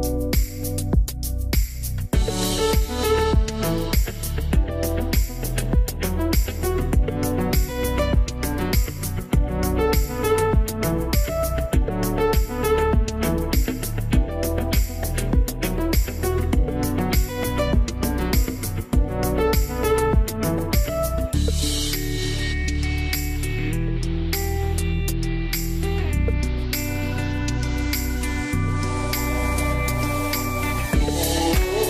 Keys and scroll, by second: 24.6 1, 24.7 Return.